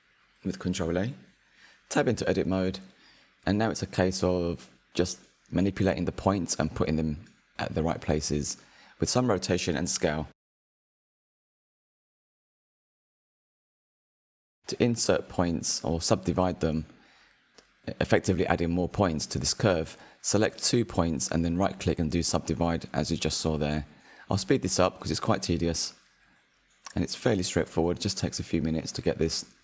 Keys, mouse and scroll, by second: 2.0 Tab, 3.3 click, 4.6 click, 5.5 click, 7.7 g, 10.0 r, 14.0 s, 16.1 click, 17.7 s, 19.0 g, 19.8 r, 20.7 s, 21.5 click, 21.7 shift+click, 22.0 right click, 22.4 click, 22.6-23.0 scroll up 3, 22.7 shift+middle click, 23.0 g, 24.0 r, 25.4 s, 27.0 click, 29.5 Tab.